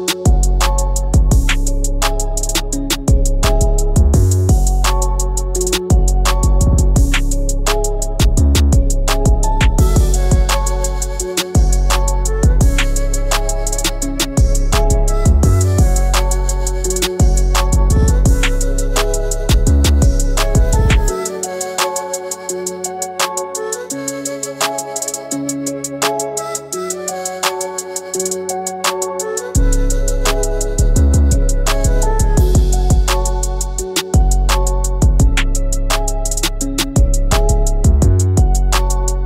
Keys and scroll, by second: 10.7 Left, 11.3 Down, 11.5 Down, 18.3 ctrl+alt+shift+], 29.0 Left, 29.9 Right, 30.4 Down, 31.6 Right.